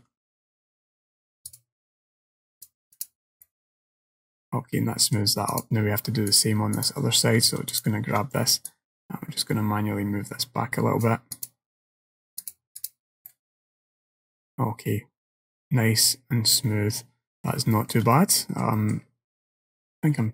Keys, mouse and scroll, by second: 2.6 click, 3.5 middle click, 5.6 click, 6.4 click, 7.8 alt+click, 8.7 click, 11.4 click, 12.5 click, 13.3 middle click, 17.8 shift+middle click, 18.8 middle click, 19.1-19.9 scroll down 1.